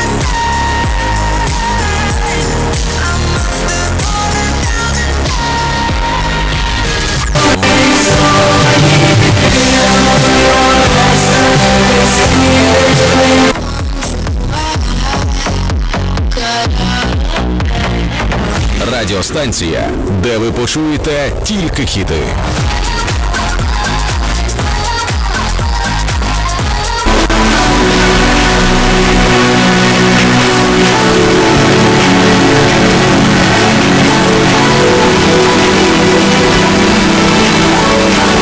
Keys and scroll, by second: 13.5 Page_Down.